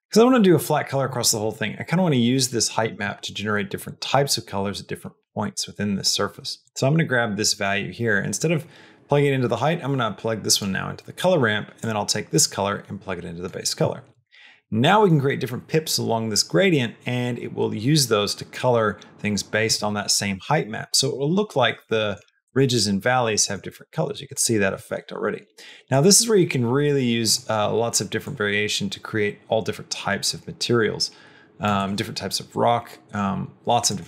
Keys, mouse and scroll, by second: 3.7 click, 6.5-10.4 drag, 11.6-13.5 drag, 21.5 middle click, 22.3-23.4 middle drag, 25.8 click, 27.1 click, 33.8 click.